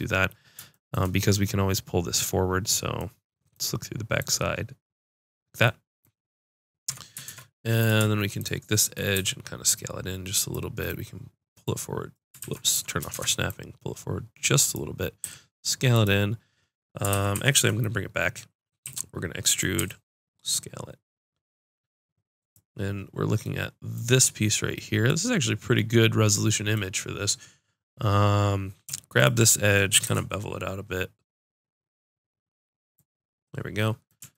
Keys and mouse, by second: 0.8 click, 4.3-5.7 drag, 6.9 Tab, 8.4 click, 9.2 s, 12.4 ctrl+z, 13.1 shift+Tab, 14.4-17.4 drag, 15.2 s, 17.1 ctrl+z, 17.4 ctrl+z, 18.9 e, 19.8 s, 22.9-24.5 drag, 29.2 click, 30.1 ctrl+b.